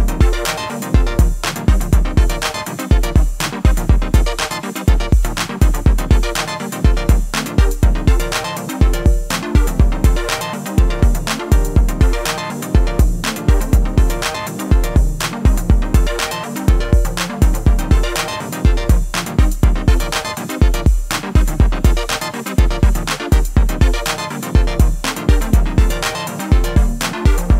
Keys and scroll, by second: 5.3 ctrl+r, 20.8 /.